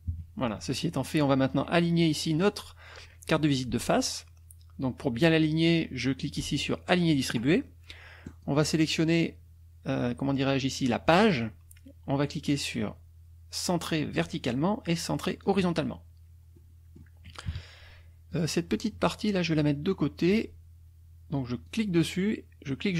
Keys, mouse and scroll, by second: 0.1 KP_Subtract, 0.8 click, 1.5 click, 6.9 click, 8.2 click, 11.2 click, 14.2 click, 15.4 click, 16.6 click, 17.5 KP_Subtract, 18.3 click, 21.7-22.9 drag.